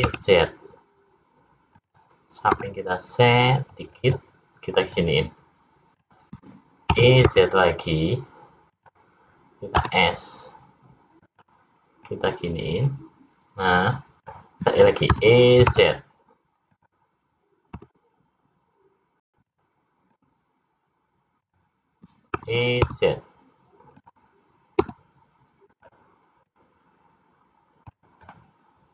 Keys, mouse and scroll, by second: 2.6 s, 5.0 click, 7.0 e, 9.8 s, 12.0 click, 15.2 e, 17.8 s, 20.1 click, 22.3 e, 24.8 s, 26.4 click, 28.2 middle click.